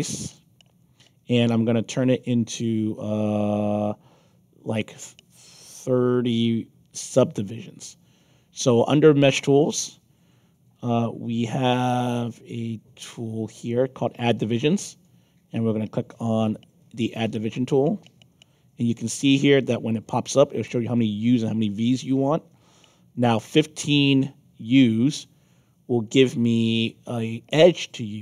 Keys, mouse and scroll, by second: 0.2 click, 9.2 click, 16.9 click, 19.5 click.